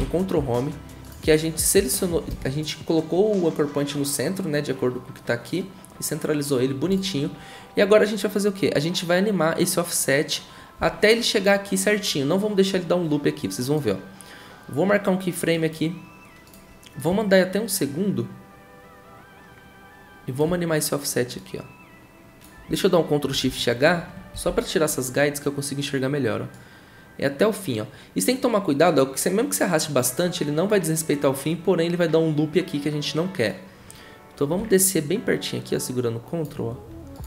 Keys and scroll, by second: 2.3 v, 24.3 ctrl+shift+h.